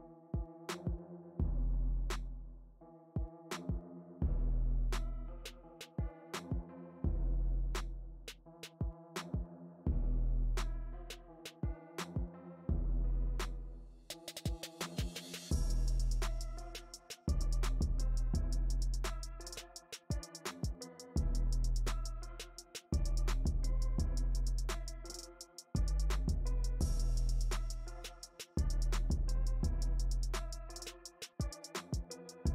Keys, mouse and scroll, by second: 0.1 f, 3.0-4.9 shift+middle drag, 4.9-9.5 drag, 9.5-15.3 middle drag, 15.3-17.4 drag, 17.4 f, 18.6-20.9 drag, 20.9-25.1 middle drag, 25.1 space, 25.6 f, 26.3-28.3 drag, 28.3-30.9 middle drag, 30.9-32.5 drag.